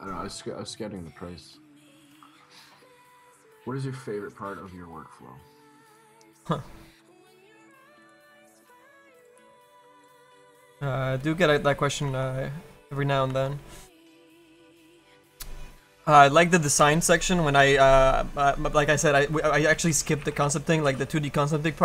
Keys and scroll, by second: 2.3 ctrl+z, 6.4 ctrl+z, 7.6 ctrl+z, 9.3 ctrl+z.